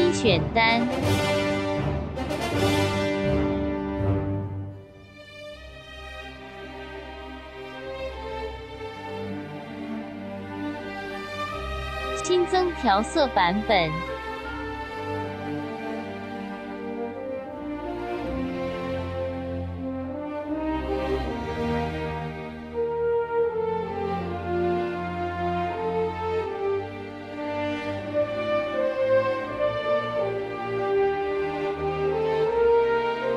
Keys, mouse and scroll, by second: 1.7 click, 8.0 click, 11.3 ctrl+Num_Lock, 11.5 ctrl+y, 13.2 right click, 13.8 click, 18.5 ctrl+Num_Lock, 18.8 ctrl+z, 21.4 right click, 26.5 click.